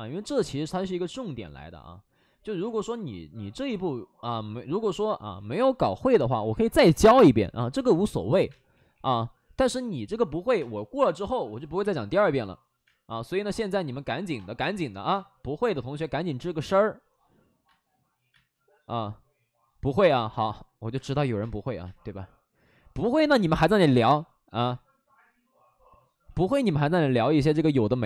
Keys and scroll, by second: 1.5 space, 2.4 ctrl+z, 2.5 space, 4.6 ctrl+z, 4.7 ctrl+z, 5.5 ctrl+z, 7.8-8.8 typing, 10.5 space, 11.7 space, 12.8 space, 14.4 space, 15.0 space, 16.4 space, 17.6 space, 18.2 space, 21.3 space, 21.8 space, 24.0 space, 24.6 space, 26.2 ctrl+z.